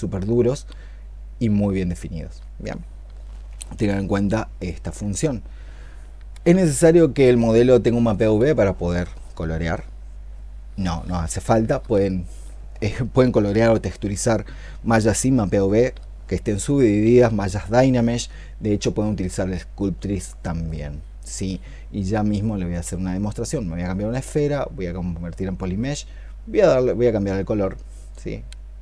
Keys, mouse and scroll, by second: 3.6 ctrl+z, 4.7 ctrl+z.